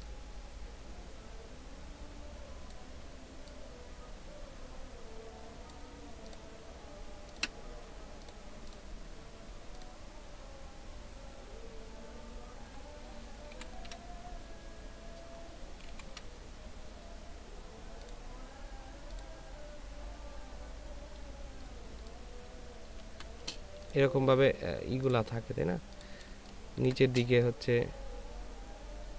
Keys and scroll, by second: 13.5 ctrl+i, 15.9 ctrl+i, 22.2 ctrl+space, 26.3 ctrl+space.